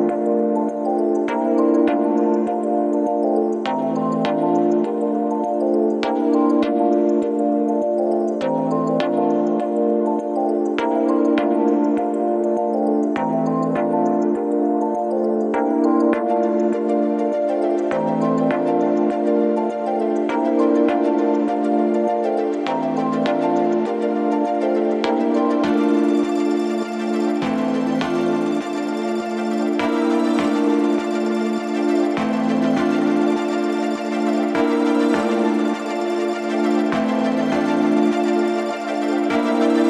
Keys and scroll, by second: 2.2 3, 21.8 ], 28.5 ctrl+z, 29.8 ctrl+z.